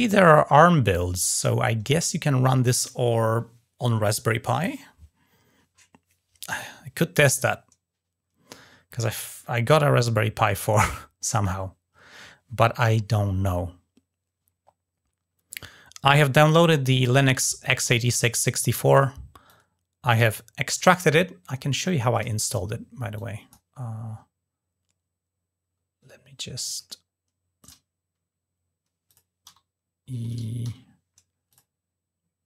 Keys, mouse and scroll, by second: 19.2 click, 21.9 click, 22.9 click, 26.5 middle click, 27.4 click, 28.8 click, 31.2 click.